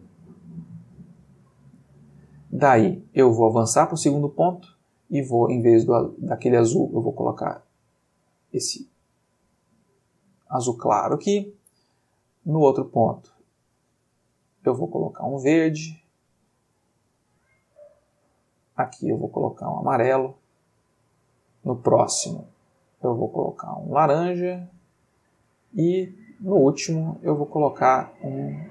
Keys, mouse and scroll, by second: 3.5 click, 4.5 click, 5.8-7.2 drag, 7.4-8.1 drag, 9.6 click, 12.1 click, 12.9 click, 13.7-14.4 drag, 14.7-15.8 drag, 16.7 click, 17.8 click, 18.5-19.2 drag, 19.5 click, 21.3 click, 22.4 click, 23.2-24.1 drag, 24.6-25.2 drag, 26.7 click, 27.3 click, 28.2-28.7 drag.